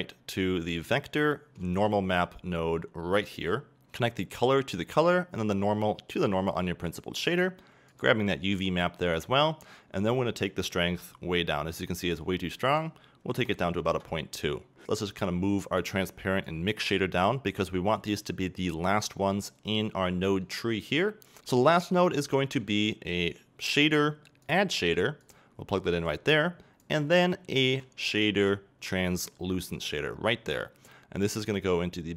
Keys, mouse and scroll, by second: 14.0 2, 14.0 KP_Enter, 26.1-26.5 drag.